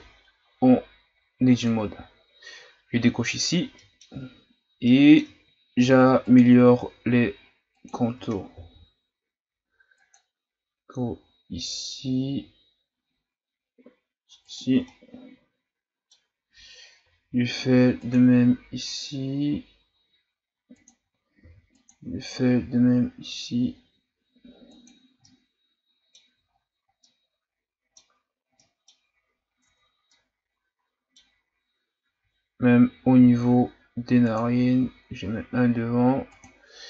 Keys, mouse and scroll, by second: 1.5 click, 3.8 middle click, 4.3-4.8 scroll up 2, 4.8-5.8 middle drag, 5.8 ctrl+r, 8.5 ctrl+r, 14.8-17.0 middle drag, 17.0 ctrl+r, 21.4 ctrl+r, 25.2-26.5 middle drag, 26.5-27.0 scroll down 6, 27.0-28.2 middle drag, 28.2-28.6 scroll up 1, 28.6-29.8 middle drag, 29.8 Tab, 30.1-31.7 middle drag, 31.7 scroll up 1, 32.0 Tab, 33.2 ctrl+r.